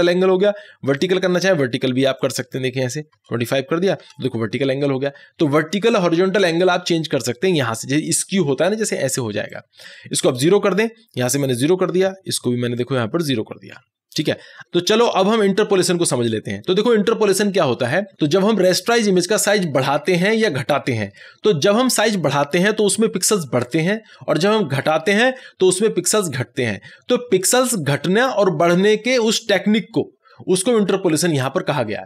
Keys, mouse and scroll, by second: 0.7 typing, 1.0-3.2 drag, 3.2 2, 9.6-11.8 drag, 11.8 0, 12.8 click, 13.8 0.